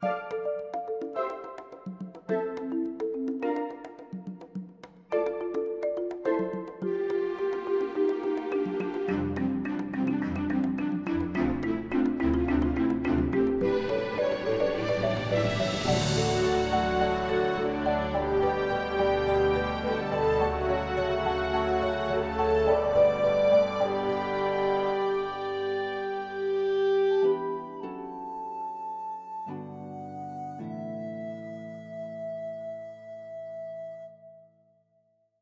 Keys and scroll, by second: 4.3 ctrl+b, 6.3 ctrl+b, 8.4 ctrl+b, 9.7 Tab, 10.7 Tab, 12.0 ctrl+r, 12.5 ctrl+b, 13.8 alt+s, 15.1 2, 16.3 ctrl+b, 18.0 Tab, 18.6 alt+a, 21.4 g, 21.5 x, 23.0 g, 23.1 x, 24.3 Tab, 24.7 alt+a, 25.7 ctrl+r, 26.5 ctrl+b, 30.5 alt+s, 32.1 2, 33.1 ctrl+b.